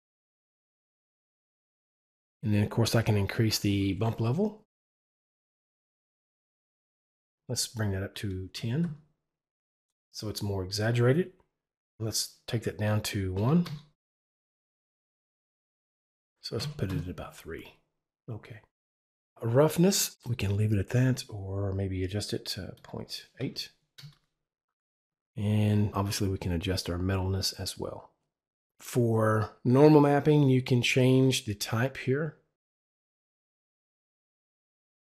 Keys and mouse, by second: 7.1 click, 8.2 click, 8.5 KP_0, 8.8 KP_Enter, 11.8 click, 13.1 click, 13.3 KP_1, 13.6 Return, 15.7 Return, 15.7 click, 16.5 click, 16.9 KP_Enter, 20.6 KP_Enter, 21.3 click, 22.7 click, 23.4 KP_8, 24.4 KP_Enter, 32.5 click, 33.2 click, 34.5 click.